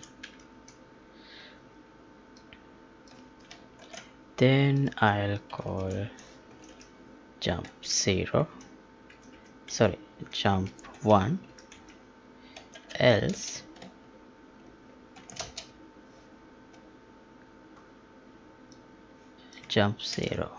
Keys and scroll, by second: 3.7 ctrl+x, 5.5 Delete, 5.7 ctrl+v, 6.4 Left, 20.1 ctrl+c.